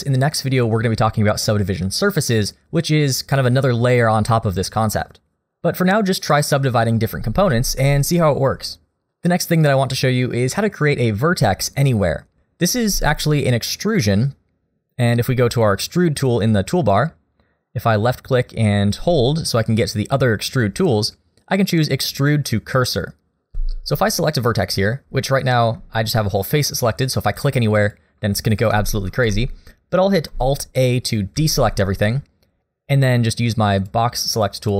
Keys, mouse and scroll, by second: 7.5 ctrl+z, 15.7 click, 18.1 click, 23.5 ctrl+z, 27.4 click, 27.9 click, 28.7 ctrl+z, 29.1 ctrl+z, 31.4 alt+a, 33.8 click, 34.4 click.